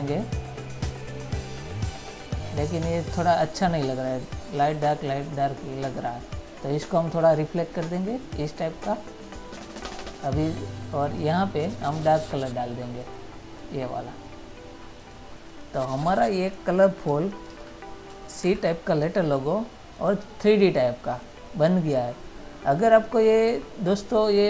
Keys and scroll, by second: 17.8 ctrl++, 18.8 ctrl+-.